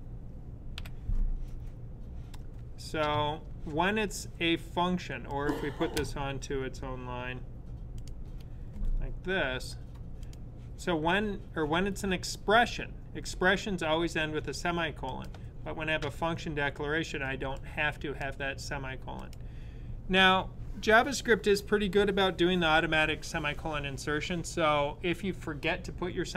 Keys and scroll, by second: 0.6 ,.